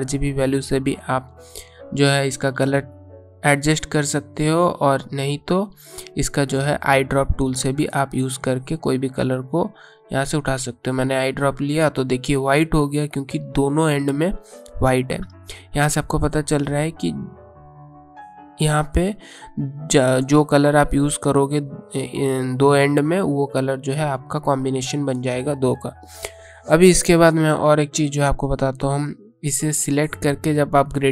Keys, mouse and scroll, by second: 8.0 click, 15.7 ctrl+z, 15.9 typing, 21.8 click, 23.9 click, 27.7 click.